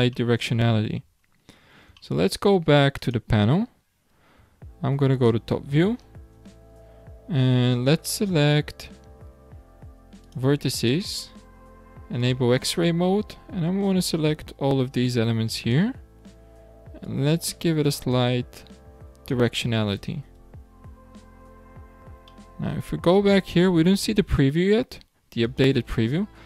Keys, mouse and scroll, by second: 0.2-0.9 shift+middle drag, 0.9-1.3 shift+scroll down 1, 1.3-2.0 scroll up 5, 2.0-3.0 shift+middle drag, 3.0 click, 4.4 `, 6.0-6.3 scroll up 3, 6.3 Tab, 6.9 scroll up 2, 8.6-10.2 scroll up 2, 10.2 click, 10.8 click, 12.2-14.1 drag, 17.0 click, 20.4 Tab, 20.8-22.3 scroll down 19, 22.3-23.1 middle drag, 23.1-23.4 scroll down 1, 23.4-24.1 shift+middle drag, 24.1-25.4 scroll up 4, 25.4 click.